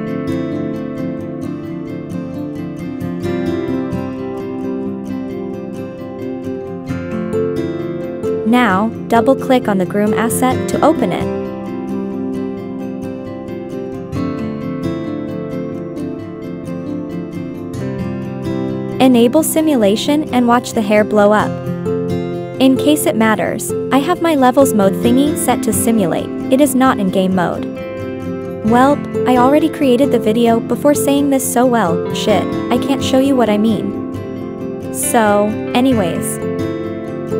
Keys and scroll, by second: 1.2 Right, 1.6 Left, 1.9 Left, 2.0 Right, 2.3 Right, 2.6 Left, 27.9 Down, 28.3 Up, 28.8 Right, 29.4 Left, 29.8 Right, 30.5 Left, 30.8 Right.